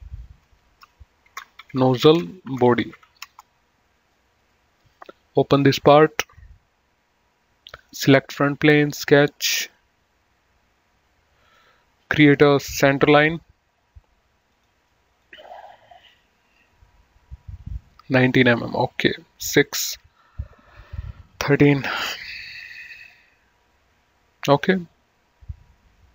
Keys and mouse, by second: 0.3 F2, 1.3-3.7 typing, 4.6 right click, 5.8 click, 8.0 click, 11.7 click, 13.3 click, 14.6 click, 15.0 right click, 15.4 click.